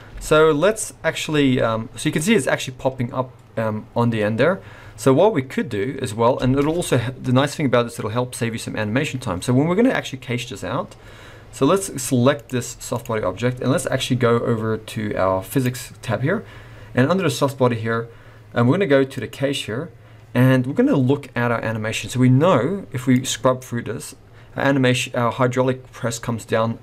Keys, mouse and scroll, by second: 0.1 space, 1.2 space, 2.2 scroll up 1, 6.4 space, 12.3 click, 12.9 click, 15.5 click, 19.1 click, 21.2 scroll down 1, 23.1 click.